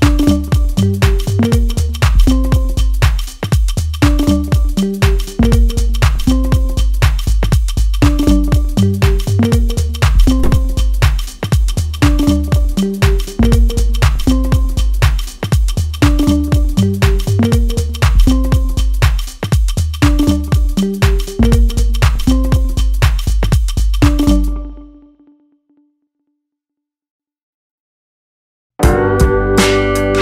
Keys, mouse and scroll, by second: 0.1-1.1 scroll up 1, 2.5 middle click, 3.7 Tab, 4.5 Tab, 5.2 middle click, 16.1 click, 17.0 a, 17.8 Tab, 18.4 middle click, 19.9 ctrl+r, 25.9 ctrl+r, 29.1 ctrl+r.